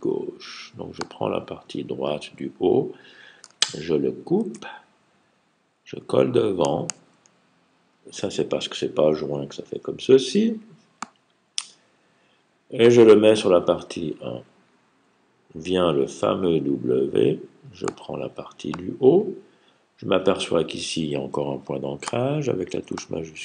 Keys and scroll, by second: 4.2 super+x, 6.8 super+f.